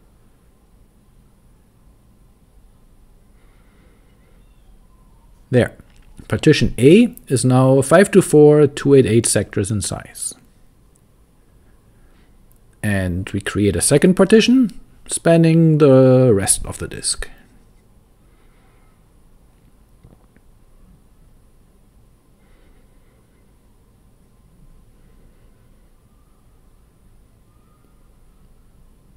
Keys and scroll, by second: 0.7 Return, 1.3 shift+;, 1.5 shift+4, 1.8 Return, 2.6-4.9 typing, 6.8 super+v, 9.8 Escape, 10.7-13.2 typing, 15.5-18.1 typing, 19.3-29.0 typing, 24.4 super+v, 24.9 Escape.